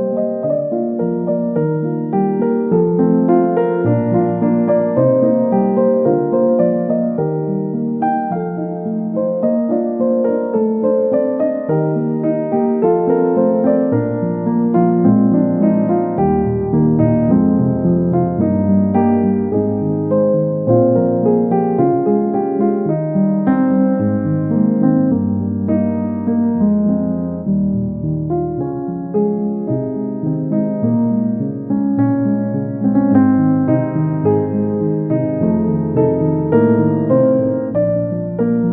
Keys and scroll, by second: 3.5 ctrl+z.